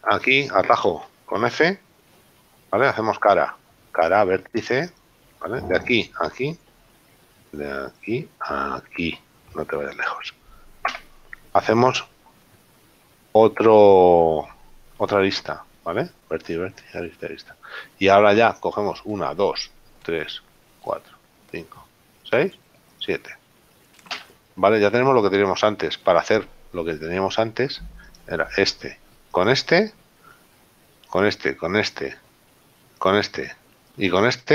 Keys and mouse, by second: 0.4 shift+right click, 3.1 f, 6.0 shift+right click, 8.0 right click, 9.4 shift+right click, 11.1 f, 20.4 shift+right click, 24.4 f, 28.2 right click, 31.1 shift+right click.